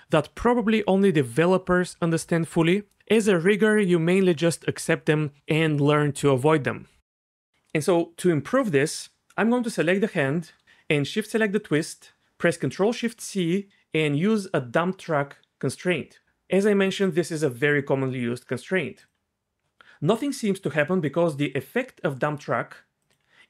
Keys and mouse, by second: 12.8 ctrl+shift+c, 23.0 click.